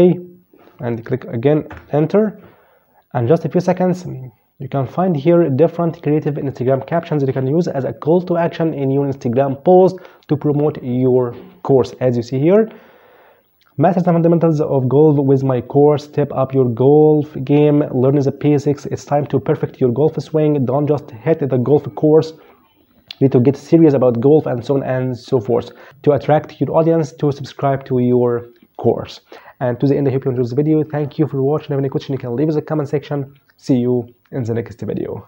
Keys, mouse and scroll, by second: 0.8 Return.